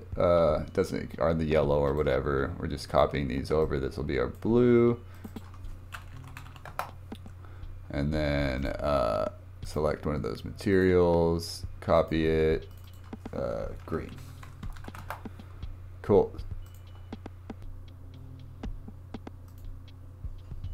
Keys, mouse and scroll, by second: 1.9-3.1 drag, 5.1-14.7 drag, 14.7 e, 16.7 click, 17.6 shift+a, 19.5-20.2 drag.